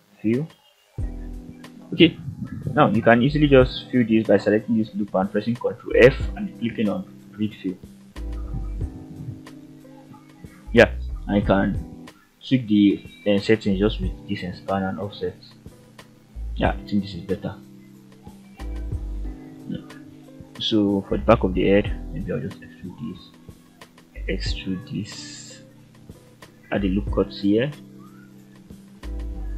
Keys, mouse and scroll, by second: 0.0 ctrl+z, 0.4 ctrl+z, 1.0 ctrl+z, 1.6 ctrl+z, 2.2 click, 3.8 ctrl+f, 7.6 click, 13.4 click, 15.1-15.5 scroll down 2, 15.5-16.8 middle drag, 17.4 shift+middle click, 17.9-18.2 scroll up 3, 18.6 click, 19.6 shift+click, 20.0-20.4 scroll down 3, 20.4 middle click, 21.3-21.7 scroll up 1, 22.1 e, 22.9 click, 23.3 middle click, 24.0 e, 26.1 click, 27.2 ctrl+r, 28.0 Escape, 28.5 click, 29.0 g.